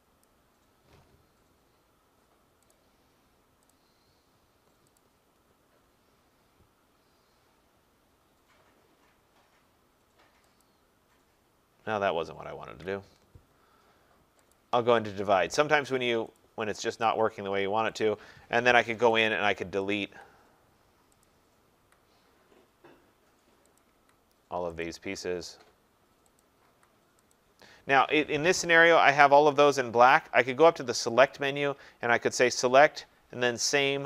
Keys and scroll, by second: 12.6 ctrl+z, 18.8 Delete.